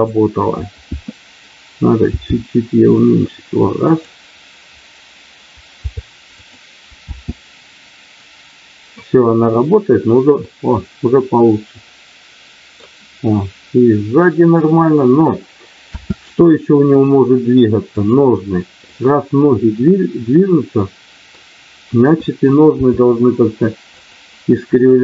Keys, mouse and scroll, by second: 2.1 g, 3.8 click, 7.0 space, 10.5-12.7 middle drag, 15.8 space, 16.2 middle click, 18.9-21.4 middle drag, 22.8 r, 23.9 click, 24.9 click.